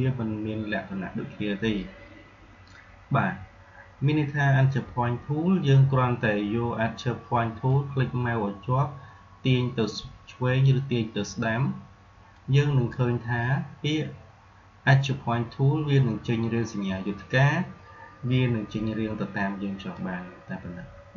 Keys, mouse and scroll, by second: 7.6-14.7 drag, 19.9-21.1 drag.